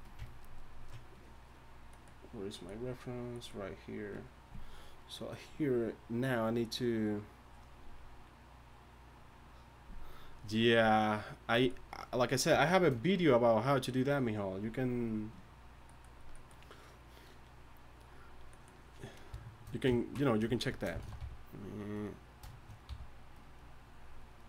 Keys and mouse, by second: 21.0-22.9 typing.